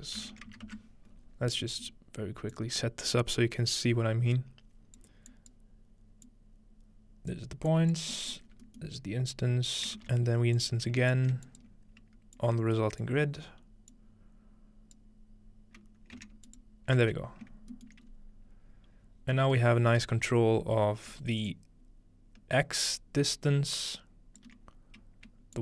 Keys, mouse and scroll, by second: 1.5 scroll down 2, 1.7-5.0 middle drag, 2.5-8.1 drag, 8.1-10.0 middle drag, 8.5-9.6 scroll down 2, 10.0 shift+d, 10.6-12.1 drag, 12.4-13.8 drag, 13.9-16.2 drag, 16.5 ctrl+alt+shift+click, 17.3-18.1 scroll down 1, 17.7-19.6 shift+middle drag, 18.1 scroll up 2, 18.7 scroll up 1, 19.8 scroll up 1, 20.8-21.5 scroll up 1, 21.5-25.6 shift+drag.